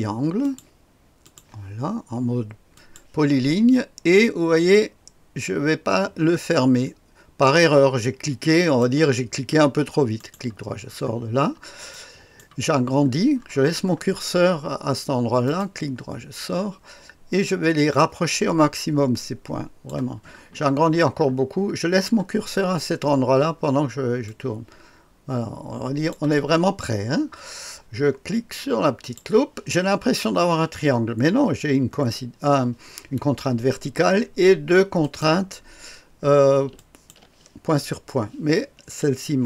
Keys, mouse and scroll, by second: 0.4 click, 1.4 click, 2.8 click, 3.2 click, 8.6 click, 10.2 right click, 10.9-12.1 scroll up 3, 11.9 right click, 12.8-15.5 scroll up 2, 15.5 right click, 18.0-19.9 drag, 20.4-22.0 scroll up 2, 22.0-23.1 scroll up 1, 23.1-24.3 scroll up 1, 24.3-26.2 drag, 29.0 click, 35.0 click, 36.8 ctrl+click.